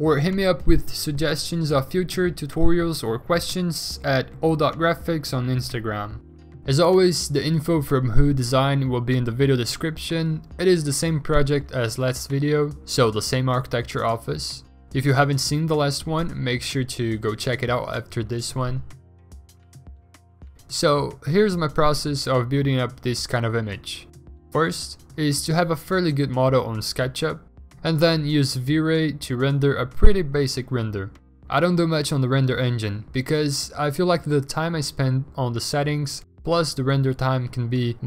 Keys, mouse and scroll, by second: 0.1 ctrl+d, 0.4 middle click, 4.4 v, 6.0 v, 10.9 b, 11.4 5, 12.0 ctrl+z, 12.2 3, 13.2 ctrl+d, 14.0 ctrl+z, 14.3 b, 14.8 ctrl+d, 15.2 v, 16.6 s, 17.4 b, 17.7 b, 18.5 0, 19.9 ctrl+z, 19.9 3, 21.1 v, 24.9 ctrl+i, 25.1 b, 25.3 b, 25.5 b, 25.6 ctrl+z, 28.8 b, 33.0 ctrl+z, 35.5 v, 36.4 alt+Tab, 36.4 Escape, 36.6 ctrl+g, 37.2 e.